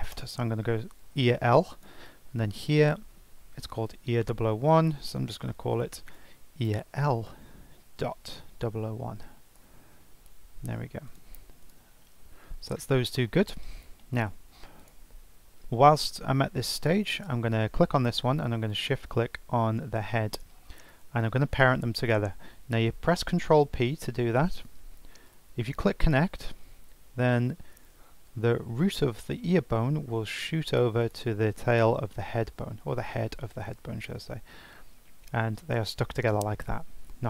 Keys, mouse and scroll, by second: 1.7 click, 2.4 F2, 4.5 BackSpace, 4.7 BackSpace, 8.6 0, 11.1 click, 11.6 click, 13.2-13.6 scroll down 4, 13.6-14.0 scroll up 4, 14.0 shift+middle click, 14.4 scroll down 1, 14.5 scroll up 1, 14.8 click, 16.0-16.3 scroll down 6, 16.3-16.7 scroll up 2, 16.7 shift+middle click, 17.2 scroll up 2, 18.7 shift+click, 23.4 ctrl+p, 31.0 click, 34.6 g.